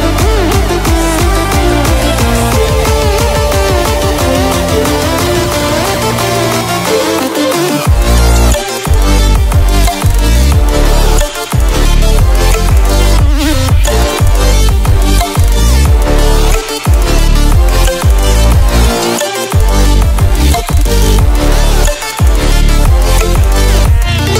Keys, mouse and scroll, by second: 0.0 click, 0.1 Delete, 0.2 click, 0.5 Delete, 0.6 click, 0.7 Delete, 0.8 click, 0.9 Delete, 1.0 click, 1.1 Delete, 1.1 click, 1.2 Delete, 1.4 click, 1.4 Delete, 1.6 click, 1.6 Delete, 1.7 click, 1.7 Delete, 1.9 click, 1.9 Delete, 2.1 click, 2.1 Delete, 2.2 click, 2.2 Delete, 2.4 click, 2.7 Delete, 2.9 click, 3.0 Delete, 3.4 click, 3.6 Delete, 4.1 click, 4.3 Delete, 4.9 click, 5.0 Delete, 5.5 click, 5.6 Delete, 6.3 click, 6.4 Delete, 6.7 click, 7.0 Delete, 7.5 click, 7.8 Delete, 8.4 click, 8.5 Delete, 9.3 click, 9.5 Delete, 10.1 click, 10.6 Delete, 11.1 click, 11.4 Delete, 12.0 click, 12.3 Delete, 14.2 click, 14.5 Delete, 17.6-24.1 drag.